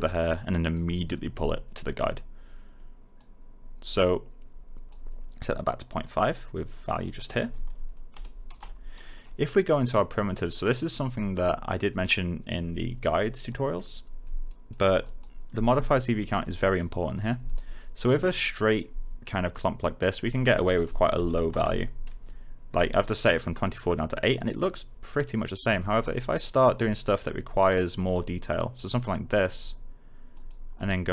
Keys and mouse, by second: 0.7 alt+right click, 3.1 click, 8.1 5, 8.4 Return, 13.0 click, 14.4 alt+middle click, 15.0 alt+click, 15.8 alt+middle click, 17.5 click, 18.2 alt+right click, 20.3 click, 21.1 8, 21.4 Return, 25.7-29.5 drag.